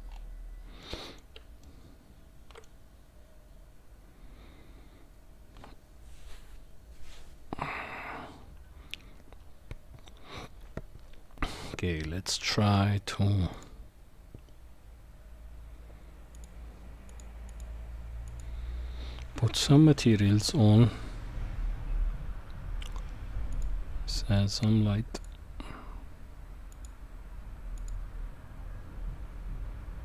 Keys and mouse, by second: 0.8-1.2 middle drag, 1.6-2.6 shift+middle drag, 15.5 click, 17.1 click, 17.6-18.5 drag, 25.2 click, 26.9 click, 27.8 click.